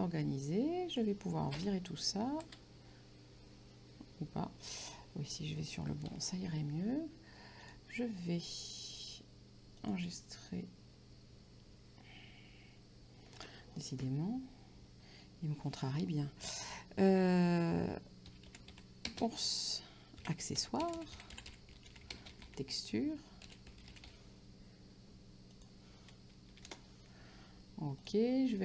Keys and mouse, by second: 2.0 Delete, 6.3 Delete, 8.4 click, 9.9 click, 17.3-24.6 typing, 25.6 click, 26.6 Delete, 26.7 Return, 28.0 click.